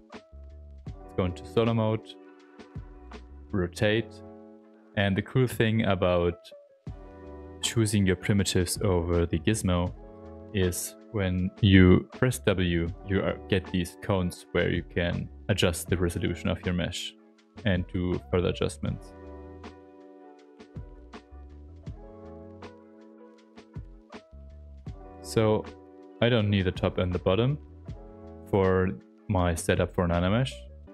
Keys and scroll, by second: 0.8 s, 1.8 w, 12.1 w.